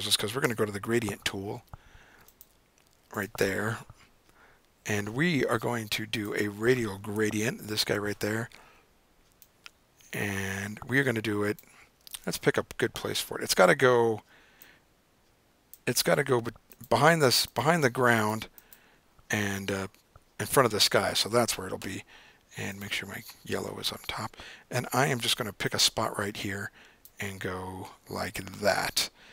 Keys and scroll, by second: 0.7 g, 12.2 super+z.